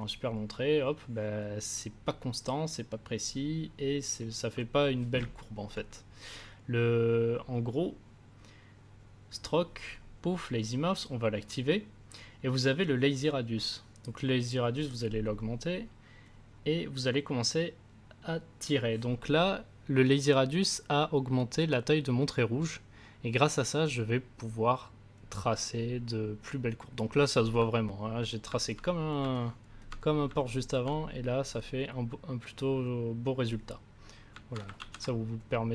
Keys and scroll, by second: 34.7 ctrl+z.